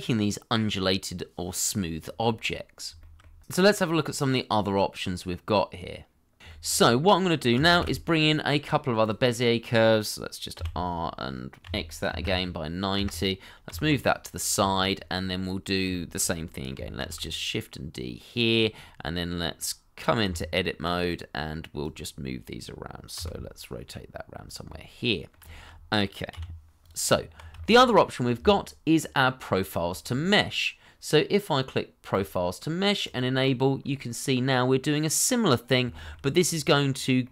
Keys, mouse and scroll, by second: 1.3 middle click, 2.0 scroll down 1, 2.2 middle click, 3.0 shift+middle click, 6.8 scroll up 1, 7.7 shift+a, 10.5 r, 11.6 x, 12.0 9, 12.9 Return, 13.6 g, 14.6 shift+middle click, 14.9 scroll down 1, 15.2 middle click, 15.9 shift+middle click, 16.3 middle click, 17.0 shift+d, 18.7 middle click, 20.2 Tab, 21.0 middle click, 23.1 r, 24.6 middle click, 25.5 shift+middle click, 26.3 r, 27.0 Tab, 27.6 shift+middle click, 29.9 shift+middle click, 33.8 scroll up 1, 34.1 middle click, 35.9 shift+middle click, 36.3 middle click.